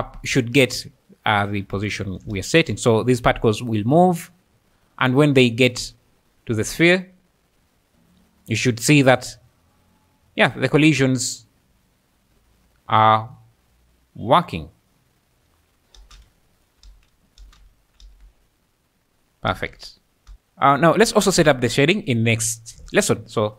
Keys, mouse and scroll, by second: 1.9 shift+click, 2.4 space, 7.9 alt+a, 7.9 space, 8.2 `, 8.7 `, 8.8 `, 10.2-10.7 scroll, 11.8-13.0 `, 13.0-13.6 scroll, 16.1-18.1 typing, 17.8 middle click, 19.5 space, 20.3 space.